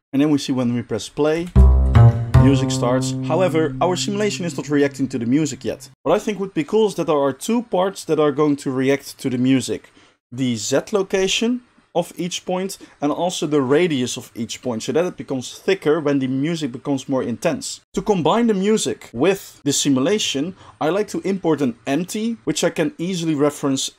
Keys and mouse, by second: 0.0-1.2 middle drag, 1.3 space, 1.6-23.9 shift+middle drag.